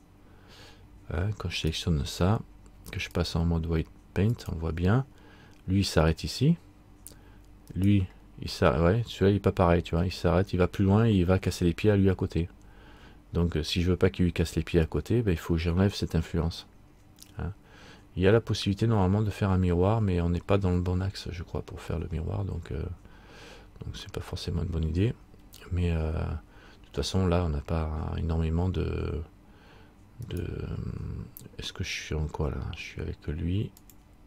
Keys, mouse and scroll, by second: 1.8 right click, 3.3 click, 7.9 right click, 20.6-22.0 scroll down 1, 22.0-22.9 scroll up 1, 24.2 scroll up 3, 24.4 middle click, 30.4 right click.